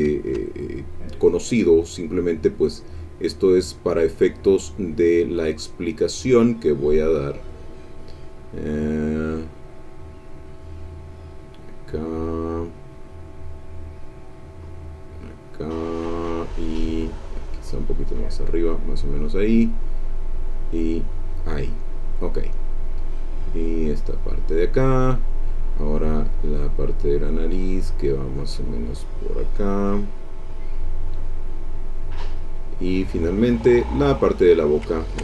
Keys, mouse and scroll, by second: 0.9 click, 1.5-3.9 drag, 4.2-7.6 drag, 8.2 click, 10.1-13.1 drag, 13.8-15.7 drag, 15.9-21.8 drag, 22.7-24.6 drag, 26.6-27.7 drag, 27.7-29.3 drag, 29.5-32.4 drag, 33.3-34.6 drag, 34.9 ctrl+middle click.